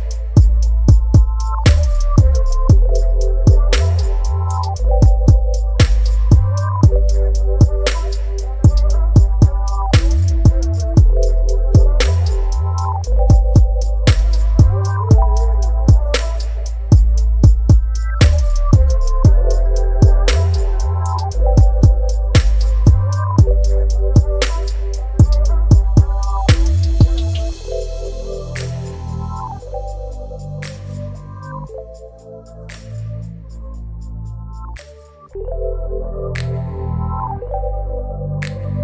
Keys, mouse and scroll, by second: 4.7 Return, 7.2-7.5 scroll up 2, 8.5 space, 8.6 click, 8.8 click, 9.1 space, 11.1 0, 12.8 click, 13.4 shift+click, 21.9 click, 24.6 right click, 25.6 click, 29.5-32.6 typing, 33.7 ctrl+a, 35.4-38.4 drag.